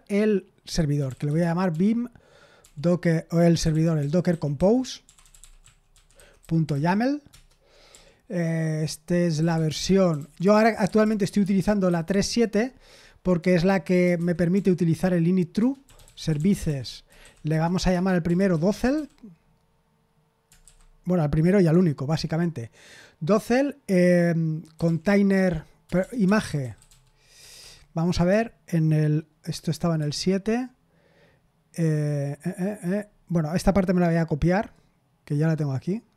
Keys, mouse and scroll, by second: 0.7-11.8 typing, 7.2 Return, 13.1-19.4 typing, 15.5 Return, 20.6 typing, 21.7 Return, 22.1 Tab, 24.5-27.5 typing, 29.9 super+7, 34.7 click, 35.9 right click.